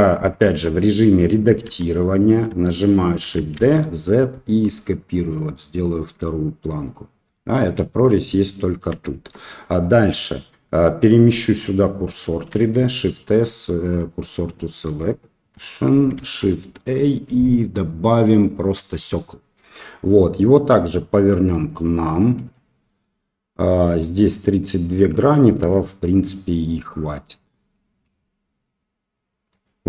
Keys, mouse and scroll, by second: 0.4 Tab, 1.6 a, 3.2 shift+d, 8.5 shift+middle click, 9.1 Tab, 12.7 shift+s, 16.1 shift+a, 21.6-22.5 drag, 26.4-29.6 drag.